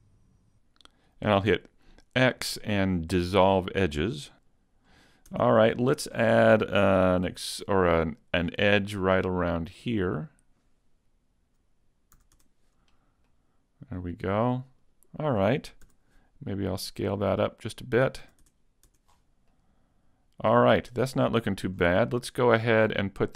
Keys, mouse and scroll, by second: 0.2 shift+right click, 1.5 x, 4.0 Tab, 4.0 scroll down 2, 4.4 right click, 4.8-5.3 scroll up 2, 5.3 Tab, 5.8 shift+middle click, 6.3 middle click, 7.2 ctrl+r, 11.6 click, 12.2 a, 12.4 Tab, 13.0-13.3 scroll down 1, 13.3 middle click, 14.8 right click, 16.0 s, 18.0 click, 18.2 a, 18.4 Tab, 18.9 Tab, 19.1 scroll down 6, 19.5 middle click, 20.8-21.2 scroll down 1, 21.2 middle click, 21.6 scroll down 1, 21.8-22.2 scroll up 5, 23.1 right click.